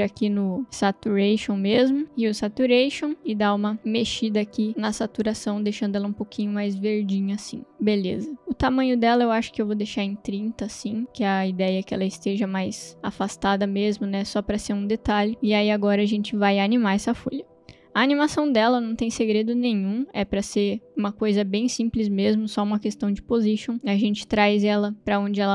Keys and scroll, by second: 0.4-1.4 typing, 2.0 Return, 9.7 0, 10.0 Return.